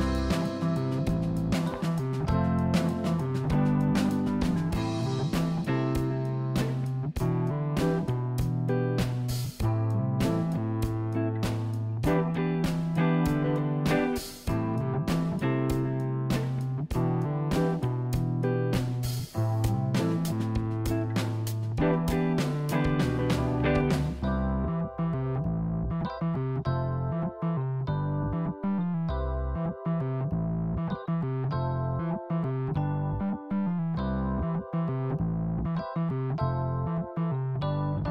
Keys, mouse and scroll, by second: 3.5 middle click, 4.5 click, 5.7 ctrl+b, 7.6 ctrl+z, 10.3 ctrl+z, 11.6 ctrl+z, 12.4 click, 12.5 click, 13.5 ctrl+b, 17.0-17.5 scroll down 4, 17.5 click, 18.0-19.6 middle drag, 19.8 middle click, 20.7 click, 21.8 e, 26.6 e, 33.6 e.